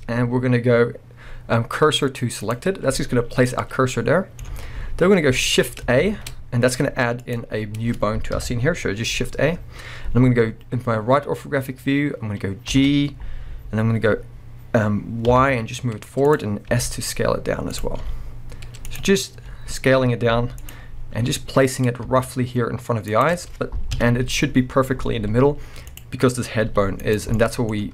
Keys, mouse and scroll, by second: 4.5 alt+a, 5.6-6.0 scroll down 2, 6.0 shift+a, 6.5-7.2 scroll down 2, 7.2 click, 8.3 KP_3, 9.4-10.1 scroll up 2, 10.1-11.3 scroll up 1, 11.3-12.1 scroll up 1, 12.1-12.7 scroll up 1, 12.7 g, 16.3 click, 16.7 s, 17.8 click, 18.0 g, 19.0 click, 19.1-19.4 scroll up 1, 19.4 s, 20.7 click, 20.8-21.2 scroll up 1, 21.2 g, 23.2 shift+click, 23.9 KP_1, 25.3 scroll down 2, 25.9 click, 26.7 g, 27.2 right click, 27.3-27.9 middle drag.